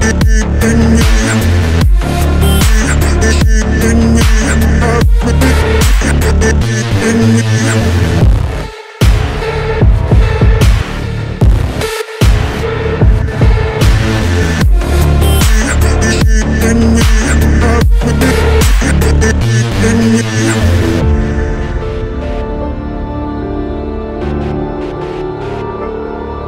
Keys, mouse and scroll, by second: 1.5 shift+click, 1.7-2.0 scroll down 1, 2.1 ctrl+t, 3.8 alt+scroll down 1, 4.0 alt+scroll up 1, 10.5 ctrl+t, 12.2 ctrl+i, 12.5 ctrl+t, 13.5 alt+scroll up 1, 15.4 ctrl+j, 16.1 alt+scroll down 1, 16.6 alt+scroll up 1, 20.7-24.8 scroll down 1.